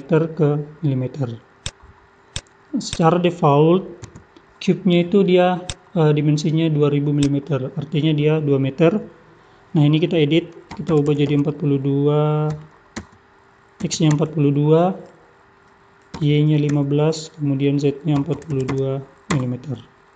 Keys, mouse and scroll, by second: 2.2 click, 4.1 n, 5.6 click, 7.3 click.